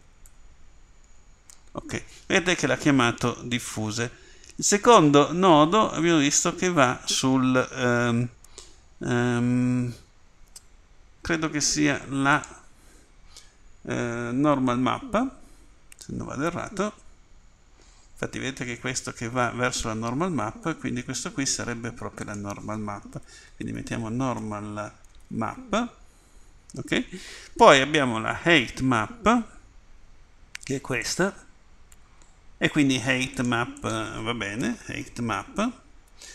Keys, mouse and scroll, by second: 1.0 f.